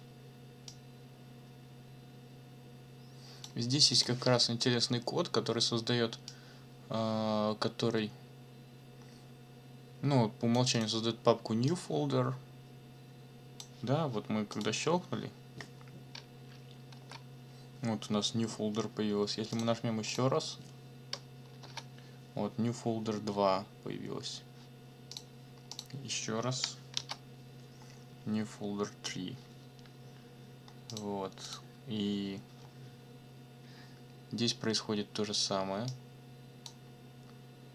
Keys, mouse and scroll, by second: 0.7-3.6 drag, 3.9 click, 6.3-10.7 drag, 10.7 middle click, 10.8 click, 11.0 middle click, 11.7-13.8 drag, 13.8 middle click, 14.5 click, 16.9 ctrl+l, 19.5 click, 20.1 click, 21.6 ctrl+l, 25.1 click, 25.7 click, 27.0 ctrl+l, 30.9 click, 31.4 click, 35.9 click.